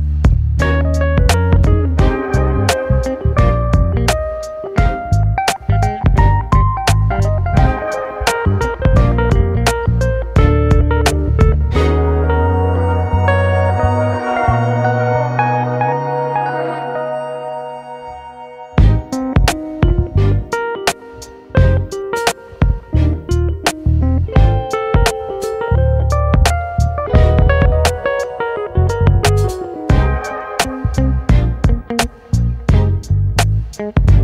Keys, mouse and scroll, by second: 0.8-4.2 middle drag, 4.2 click, 4.7-6.7 middle drag, 6.7 click, 8.2-11.3 drag, 11.3-13.3 middle drag, 14.6-17.1 shift+middle drag, 17.1 click, 18.5-20.5 drag, 21.3 click, 21.7 shift+middle click, 22.1-22.4 scroll up 1, 22.4 middle click, 22.8 click, 23.4 shift+click, 23.9 shift+click, 24.2 shift+click, 24.7 middle click, 25.4 shift+d, 26.7 p, 28.4-30.1 drag, 31.2-33.2 drag, 33.3 middle click, 34.1 a.